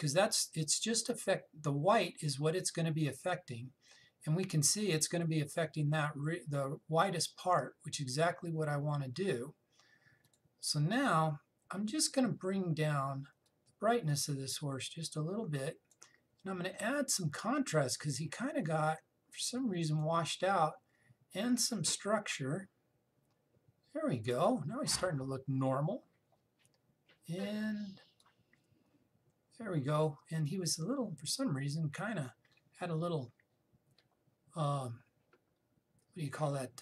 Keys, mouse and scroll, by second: 10.9 click, 11.8-14.1 scroll down 2, 14.1-18.7 drag, 18.7 click, 23.0 click, 28.9-36.3 drag.